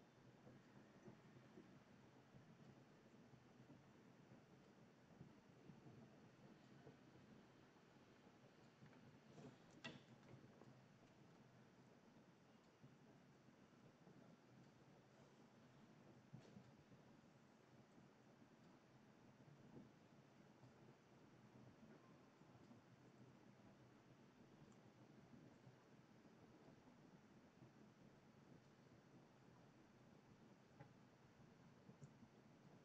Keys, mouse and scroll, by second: 13.3-23.0 drag, 23.1-29.7 drag.